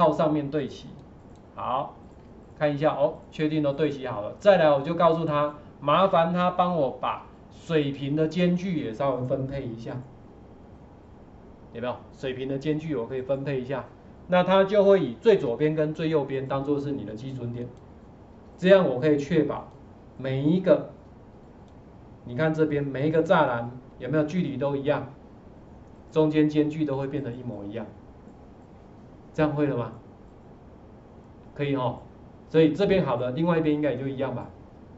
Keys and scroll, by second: 2.2 ctrl+4, 7.0 ctrl+4, 15.5 ctrl+4.